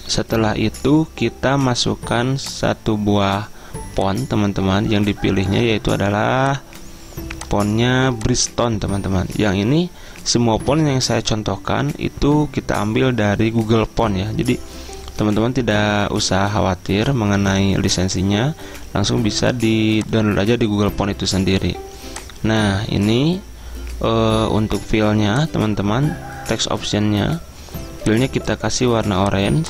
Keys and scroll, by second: 0.2 ctrl+[.